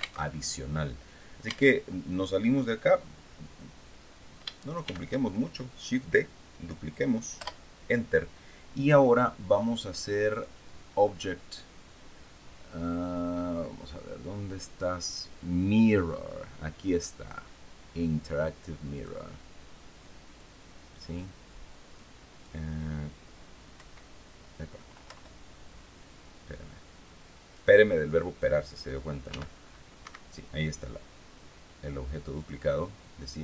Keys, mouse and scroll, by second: 1.0 Tab, 4.3 shift+d, 6.9 Return, 9.8 click, 18.4 click, 19.9 click, 21.4 click, 23.3 Up, 24.6 Return, 27.0 click, 28.8 g, 29.5 Escape, 31.9 click.